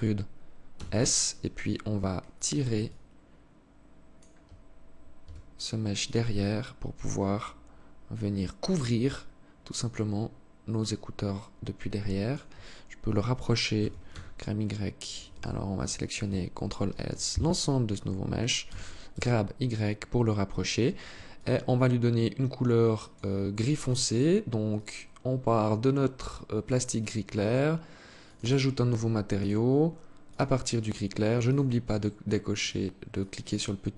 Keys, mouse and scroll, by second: 2.3 alt+click, 4.6 s, 5.8 alt+click, 13.2 g, 16.3 ctrl+l, 18.1 g, 20.8 alt+click, 24.2 click, 27.6 click, 28.8 click, 30.9 click, 32.0 click.